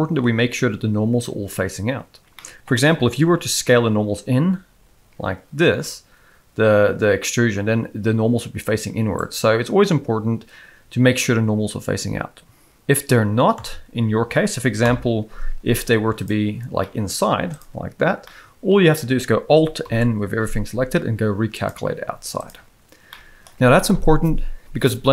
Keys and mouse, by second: 2.3 middle click, 3.1 alt+s, 13.5 a, 14.8 alt+n, 16.8 middle click, 17.2 z, 18.2 middle click, 19.8 alt+n, 22.0 z, 23.1 middle click.